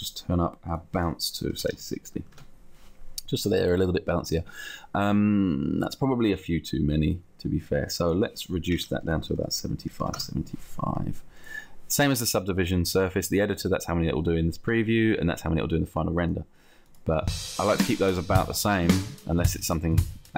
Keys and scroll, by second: 1.7 0, 2.7 Return, 8.8 7, 9.4 5, 9.6 Tab, 9.9 5, 10.3 Return.